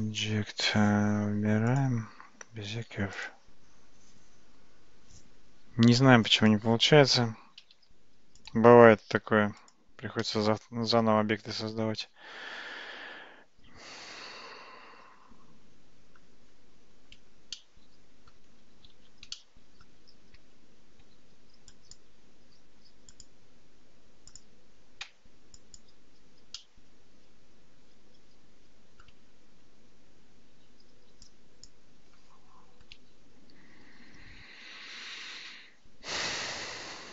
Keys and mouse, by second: 1.7 click, 6.3-6.7 drag, 7.7 x, 9.7 click, 10.3-16.3 middle drag, 17.6-18.4 middle drag, 19.0 alt+z, 19.4-19.9 middle drag, 20.4 Tab, 21.1 Tab, 21.9 click, 23.2 click, 25.1 Tab, 25.8 click, 26.6-29.1 middle drag, 31.3 shift+click.